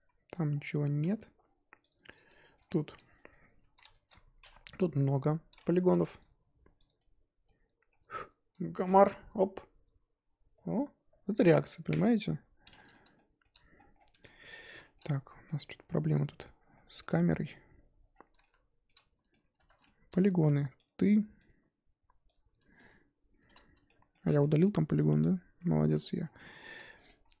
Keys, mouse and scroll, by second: 0.3 z, 0.5-1.1 scroll down 7, 1.1 Tab, 1.4-1.9 scroll down 1, 1.9 click, 2.1 click, 2.3 shift+middle click, 2.6-3.7 scroll up 6, 2.7 Tab, 3.1 shift+middle drag, 3.7 z, 3.9-4.7 shift+middle drag, 4.7 KP_1, 5.3-6.2 scroll up 1, 6.2 click, 6.8 click, 7.0-12.3 middle drag, 12.3-12.7 scroll up 4, 12.8-13.7 middle drag, 13.7-14.7 scroll down 17, 14.1 Tab, 14.9 shift+middle click, 15.0 scroll up 3, 15.4-16.5 middle drag, 16.5-17.0 scroll up 8, 17.0-18.1 middle drag, 18.1 scroll down 3, 18.4-19.4 shift+middle drag, 19.4 scroll up 2, 19.6 Tab, 19.8-20.8 shift+middle drag, 20.8 click, 21.4 click, 22.8 click, 23.8-24.4 shift+middle drag, 24.4-25.2 scroll up 2, 25.2 click, 25.9 z, 26.2 scroll down 4, 26.3-27.2 middle drag, 27.2-27.4 shift+scroll up 2.